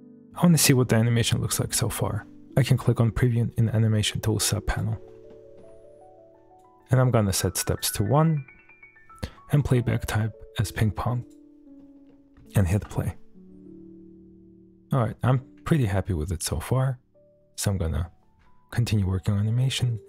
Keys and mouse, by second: 0.6 shift+middle drag, 1.0-1.9 middle drag, 4.7 click, 5.3 shift+middle drag, 6.4 drag, 7.7 click, 7.9 click, 9.6-11.4 drag, 11.8 shift+middle drag, 12.1 middle drag, 12.5 shift+middle drag, 14.6 space, 17.5 click, 19.9 click.